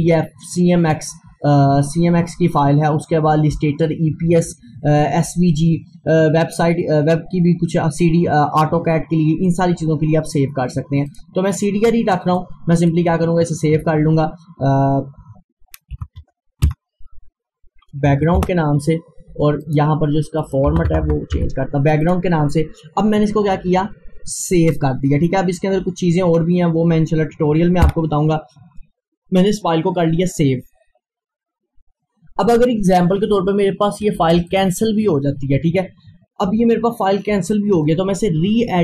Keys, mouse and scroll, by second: 11.1-15.3 drag, 15.9 click, 16.4-17.2 typing, 18.1 Down, 18.4 Return, 19.6 click, 22.0 click, 24.7-27.9 drag, 27.9 F4, 34.5 click.